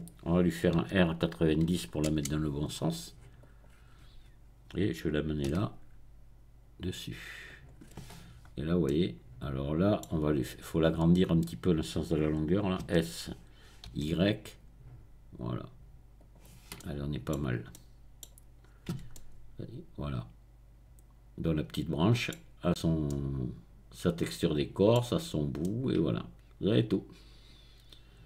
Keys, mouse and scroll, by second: 0.8 r, 1.8 KP_9, 2.2 KP_0, 3.4 click, 5.6 g, 7.4 click, 8.3-8.8 scroll up 2, 8.8-10.2 middle drag, 12.8 s, 13.9 y, 16.1 click, 16.7 middle click, 17.3-18.2 scroll down 2, 18.6-19.1 scroll up 2, 19.0 Tab, 22.6-23.1 scroll up 2, 25.0-25.7 scroll down 2.